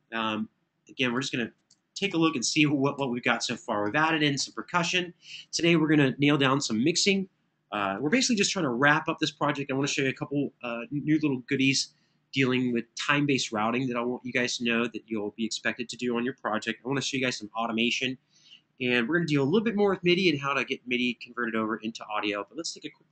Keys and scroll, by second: 3.9 super+[, 4.1 super+[.